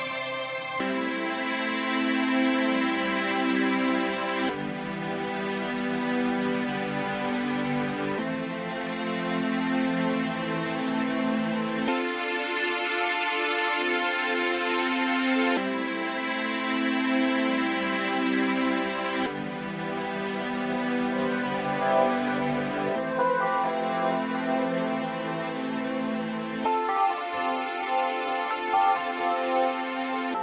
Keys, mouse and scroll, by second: 1.4 click, 10.8 click, 20.6 middle click.